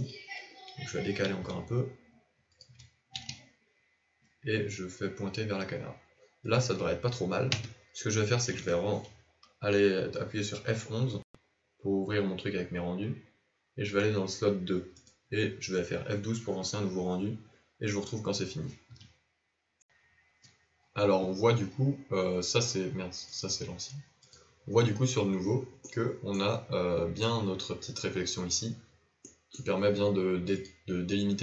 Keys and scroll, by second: 1.2 g, 3.1 r, 7.5 KP_0, 11.1 F11.